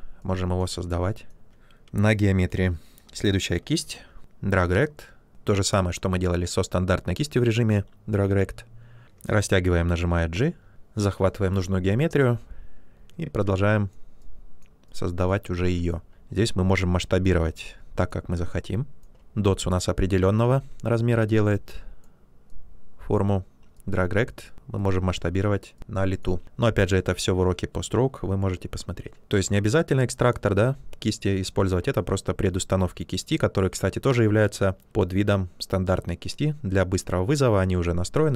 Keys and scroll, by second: 2.5 b, 3.7 x, 9.0 ctrl+z, 9.2 g.